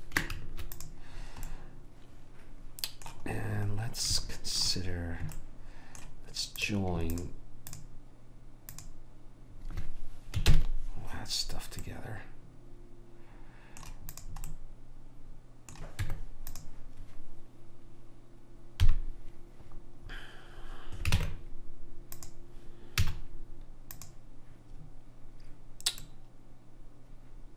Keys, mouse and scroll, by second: 0.5 ctrl+s, 3.7-6.0 middle drag, 6.8-10.7 drag, 10.7 ctrl+j, 14.3 click, 14.6-15.9 middle drag, 16.1 Tab, 19.0 KP_3, 21.3 ctrl+Tab, 23.1 z, 26.6-27.5 middle drag.